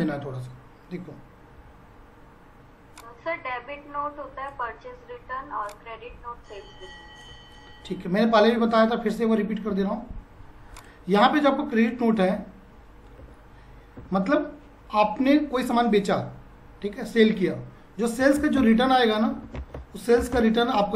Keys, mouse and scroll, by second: 1.6-5.6 ctrl+drag, 5.6 ctrl+shift+click, 9.7 t, 10.8 click, 12.1 r, 14.2 F5, 18.0-20.1 typing.